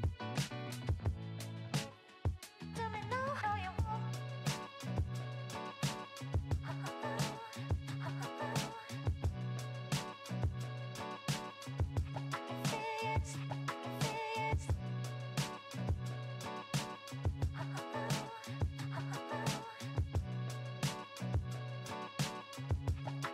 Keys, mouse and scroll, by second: 3.5 e, 4.1 s, 5.4 click, 9.9 n, 11.8-13.8 drag, 15.1 e, 16.8 click, 17.9 i.